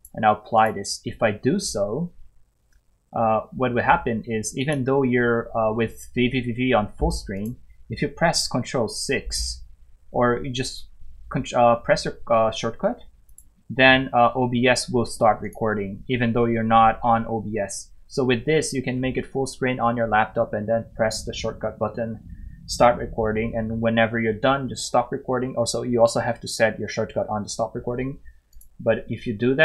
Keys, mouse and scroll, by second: 4.6 click, 7.3 click, 13.3 click, 28.5 click.